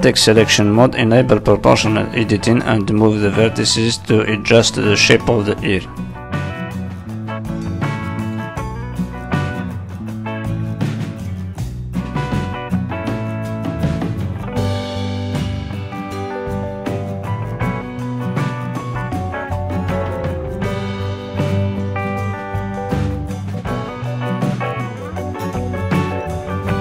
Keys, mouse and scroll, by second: 0.3 click, 0.3 shift+middle click, 1.1 click, 1.5 middle click, 2.1 click, 2.5 middle click, 3.1 click, 3.7 middle click, 4.7 click, 5.0 middle click, 5.6 click, 7.1 ctrl+z, 7.3 middle click, 8.0 click, 8.7 click, 9.2 click, 9.9 click, 11.3 middle click, 11.3 click, 13.0 middle click, 13.4 z, 14.5 middle click, 15.8 middle click, 15.9 shift+middle click, 16.2 shift+middle click, 16.3 middle click, 16.9 click, 17.2 middle click, 18.2 click, 19.4 click, 20.4 z, 21.5 middle click, 22.8 click, 24.2 middle click, 25.4 middle click, 26.0 click.